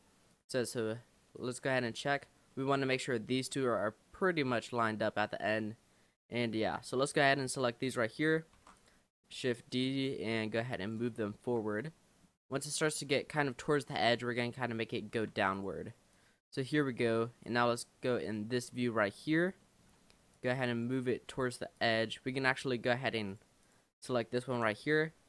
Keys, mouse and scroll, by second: 0.3 click, 1.4 click, 2.2-2.6 scroll up 2, 2.6-5.7 shift+middle drag, 6.7 l, 7.4 l, 8.6 shift+d, 10.0 click, 11.3 shift+middle click, 11.7 scroll up 1, 11.8 middle click, 12.5-13.4 scroll up 3, 13.4-15.3 shift+middle drag, 15.3 shift+d, 16.1 click, 18.3 click, 18.8 shift+middle click, 19.2-19.7 scroll up 4, 19.7 shift+middle click, 20.4 click, 21.8 click, 22.4 l, 23.3 click, 23.6 click, 24.6 l.